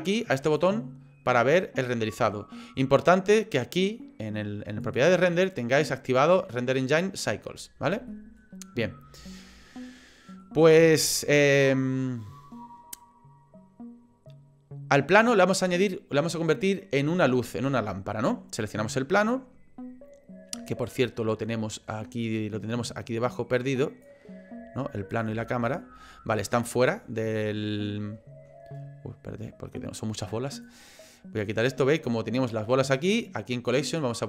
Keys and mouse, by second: 0.5 click, 8.1 shift+middle click, 9.4-10.5 shift+drag, 23.3 click, 25.1 click, 30.2 click, 31.4 click, 33.0 click.